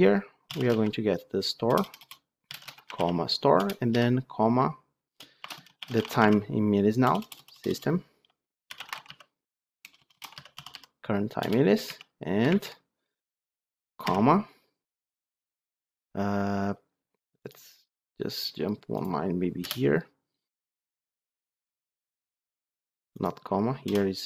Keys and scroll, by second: 3.5 Return, 11.3 Return, 11.7 alt+1.